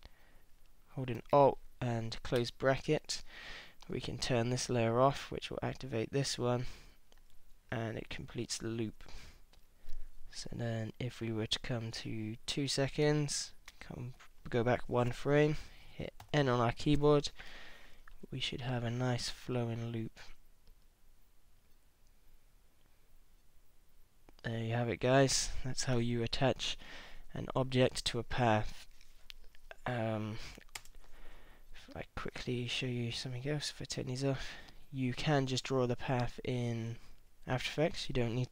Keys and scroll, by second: 2.4 alt+], 13.7 super+Left, 16.2 n, 30.8 space.